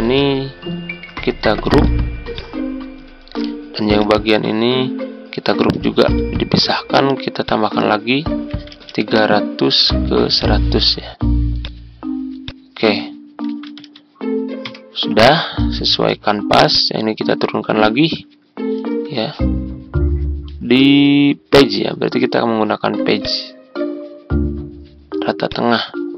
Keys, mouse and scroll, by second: 0.1 shift+click, 1.6 ctrl+g, 2.2-5.4 drag, 5.8 ctrl+g, 7.3 click, 8.2-9.3 typing, 10.3-13.5 drag, 13.3-14.3 typing, 14.6 Return, 15.9 ctrl+g, 16.6 click, 17.7 shift+click, 23.2 click.